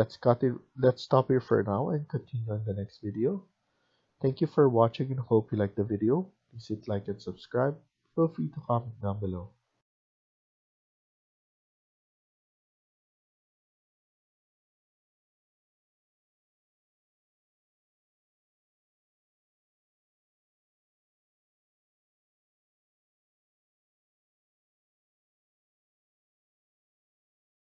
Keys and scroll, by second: 0.9 Escape, 3.4 Escape, 6.9 Escape.